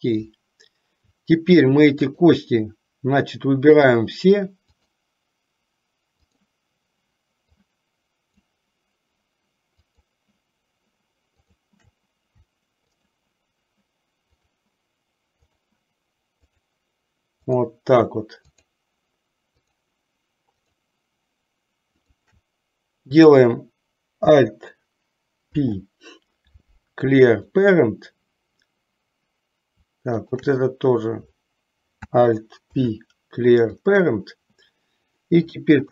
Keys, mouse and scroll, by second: 2.1 shift+click, 4.0 shift+click, 4.9 shift+click, 7.7-8.7 shift+drag, 10.0 shift+click, 11.5 shift+click, 14.4 shift+click, 15.6 shift+click, 16.6 shift+click, 17.6 shift+click, 22.1 shift+click, 25.6 alt+p, 32.7 alt+p, 35.4 middle click.